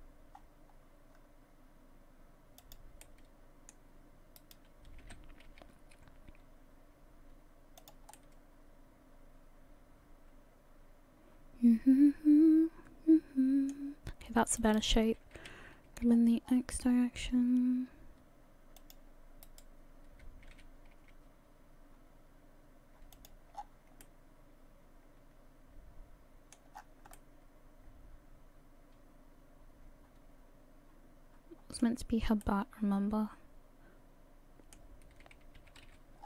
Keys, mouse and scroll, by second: 3.0 middle click, 4.4 right click, 5.0 g, 8.2 middle click, 14.6 right click, 15.4 g, 19.4 right click, 20.5 g, 23.5-24.0 scroll down 6, 24.0 middle click, 26.7-27.2 scroll up 6, 27.2 middle click, 32.4 middle click, 35.6 g.